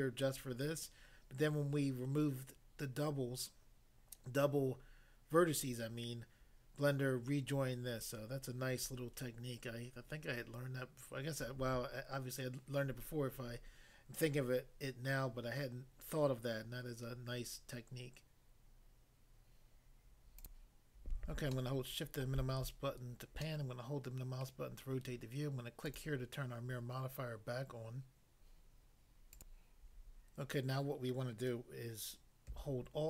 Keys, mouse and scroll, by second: 20.4 click, 20.5 click, 21.5 shift+middle click, 24.4 middle click, 25.8 click, 26.0 click, 29.3 click.